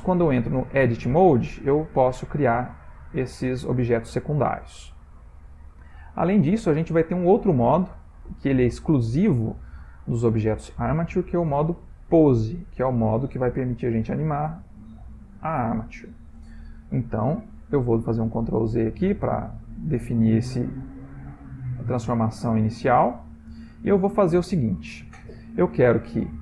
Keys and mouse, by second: 0.1 click, 1.7 click, 1.9 g, 3.3 click, 3.9 click, 4.4 click, 6.8 Tab, 11.4 click, 18.5 ctrl+z, 18.6 ctrl+z, 18.9 ctrl+z, 19.2 ctrl+z, 19.4 ctrl+z, 19.6 ctrl+z, 20.3 ctrl+z, 20.9-21.6 ctrl+z, 21.8 ctrl+z, 22.7 click, 23.3 shift+click, 23.8 x, 25.0 shift+middle click, 25.5 ctrl+middle click, 26.1 click.